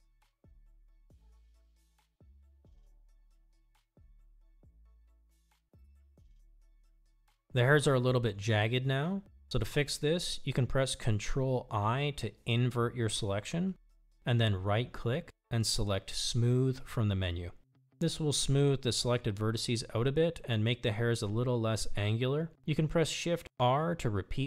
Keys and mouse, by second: 6.2-9.6 middle drag, 11.4 ctrl+i, 16.3-19.8 drag, 21.9-24.4 typing.